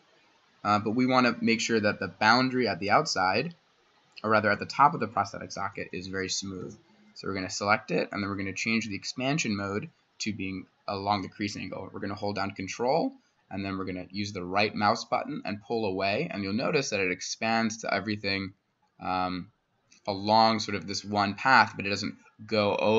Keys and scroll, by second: 0.2-6.6 typing, 3.3 Escape.